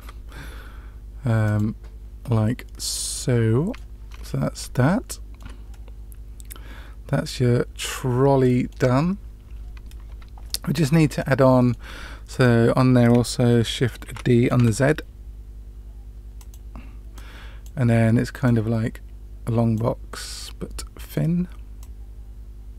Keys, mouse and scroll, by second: 1.4 click, 3.1-3.7 middle drag, 4.0 scroll down 1, 4.1 scroll up 1, 4.1-4.5 scroll down 2, 4.8-5.4 shift+middle drag, 5.6-8.7 middle drag, 10.4-10.9 middle drag, 11.2-11.7 shift+middle drag, 12.2 click, 14.0 shift+d, 17.1-17.6 drag, 18.4-19.7 drag, 20.7-21.2 middle drag, 21.7-22.7 drag.